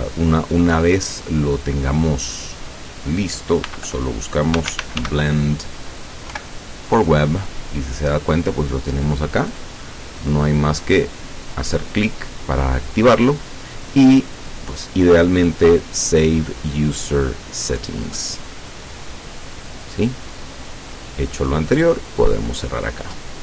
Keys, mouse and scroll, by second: 2.2 click, 3.6-6.4 typing, 9.5 click, 11.0 click, 18.3 click, 22.3 click.